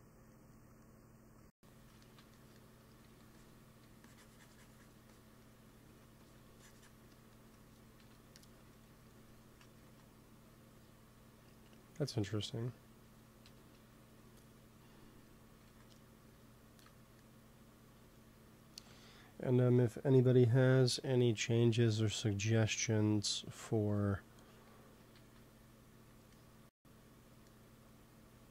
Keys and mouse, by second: 2.2 middle click, 2.8 f, 3.3-8.3 drag, 3.6 f, 7.9 KP_1, 9.7 ctrl+s, 13.3 KP_1, 15.5 ctrl+s, 22.5 ctrl+s, 25.0 ctrl+s.